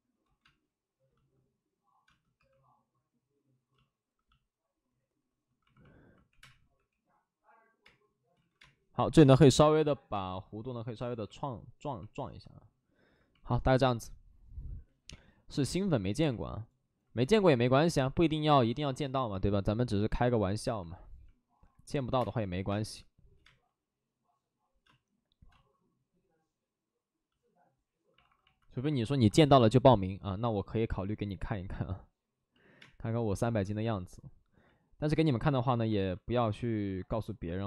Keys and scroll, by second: 0.2 ctrl+z, 0.4 space, 2.3 2, 5.7-8.5 typing, 8.3 ctrl+z, 15.7 alt+s, 16.0 alt+s, 20.8 alt+s, 22.0 5, 22.6 space, 23.1 space, 28.1 space, 28.1 alt+s, 29.2 alt+s, 29.4 alt+s, 32.5 alt+s, 32.5 ctrl+z, 32.8 space, 33.4 ctrl+z, 36.8 ctrl+z.